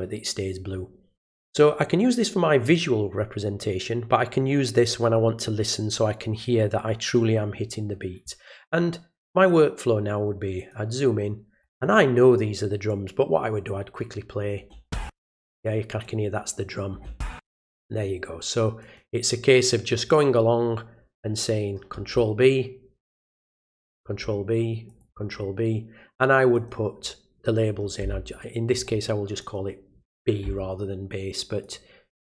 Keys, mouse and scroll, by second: 9.5 click, 10.6 click, 12.9-14.0 drag, 16.0 click, 18.8 click, 23.5 click, 24.9 click, 26.5 click, 29.4 click, 31.6 click.